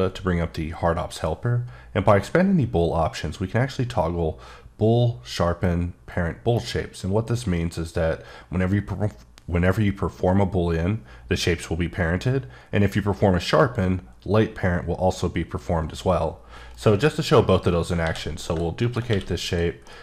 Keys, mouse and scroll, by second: 2.1 click, 6.4 click, 16.7 right click, 17.2-17.7 scroll down 1, 17.7-18.0 scroll up 1, 18.0 d, 18.5 click, 19.0 q, 19.4 click, 19.8 middle click.